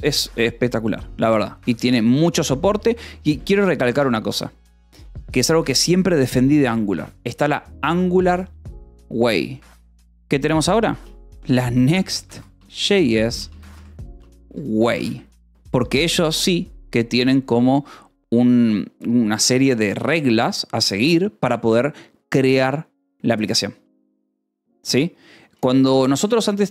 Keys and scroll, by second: 0.0 ctrl+s, 2.5 a, 2.7 space, 3.1 e, 3.3 space, 11.3-12.9 typing, 13.9-16.4 typing, 16.8 ctrl+s, 25.8-26.7 typing.